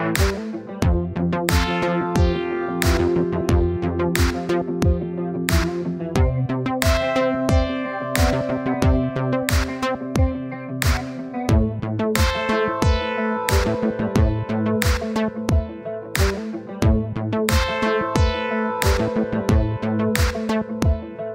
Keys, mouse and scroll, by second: 0.2-1.4 drag, 2.4-14.4 drag, 16.8 click, 17.2-18.5 middle drag, 18.6 middle click, 19.2 KP_1, 19.8-21.3 drag.